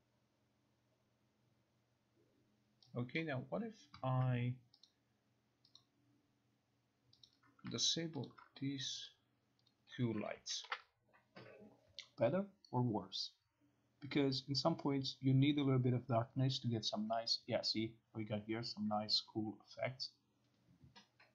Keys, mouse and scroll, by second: 3.2 click, 4.9 click, 5.8 click, 7.3 click, 8.3 ctrl+click, 9.2 click, 9.8 click, 10.4 click, 10.7 ctrl+r.